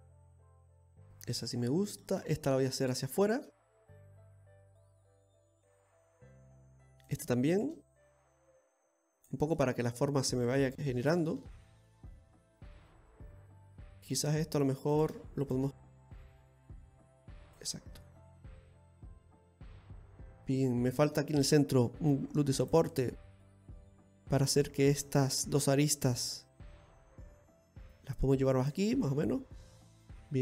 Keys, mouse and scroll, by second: 2.8 right click, 3.2 shift+right click, 4.0 click, 7.1 right click, 7.6 shift+right click, 8.2 click, 9.6 middle click, 10.6 right click, 11.0 shift+right click, 12.0 click, 13.8 middle click, 14.9 right click, 15.5 shift+right click, 16.4 click, 17.8 scroll down 2, 18.1 middle click, 22.2 ctrl+r, 23.2 middle click, 24.5 right click, 25.0 shift+right click, 25.3 middle click, 26.1 click, 28.9 middle click.